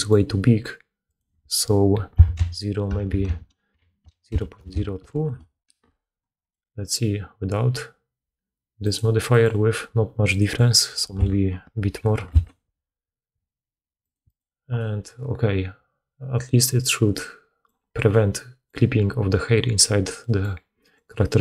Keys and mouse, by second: 3.0 BackSpace, 4.6 0, 6.4-20.9 drag, 6.4-8.9 middle drag, 6.4-8.9 right drag, 9.2 middle click, 9.2 right click, 10.3-14.1 middle drag, 10.3-14.1 right drag, 14.2 middle click, 14.2 right click, 20.9 middle click, 21.3 click.